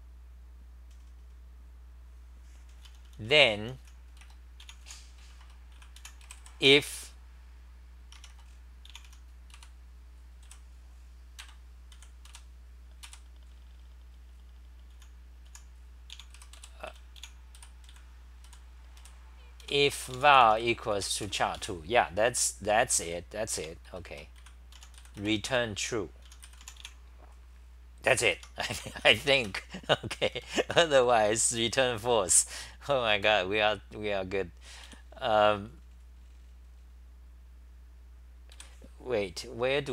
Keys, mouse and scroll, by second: 4.8 t, 5.2 Return, 5.4 Return, 5.7 c, 6.0 u, 9.0 Home, 9.0 u, 9.5 k, 10.4 f, 11.4 ctrl+g, 12.0-12.8 typing, 15.0-21.7 typing, 20.5 Home, 23.0 r, 23.9 Return, 23.9 e, 24.1 Return, 24.4 c, 24.8 u, 28.4 Home, 30.1 ctrl+c, 30.1-32.1 typing, 33.2 Return.